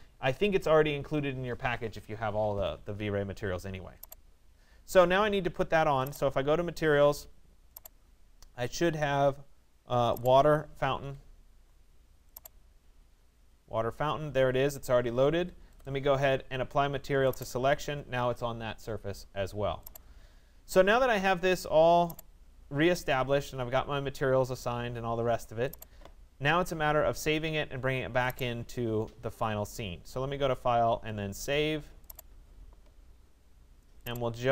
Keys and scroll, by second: 10.6 Escape.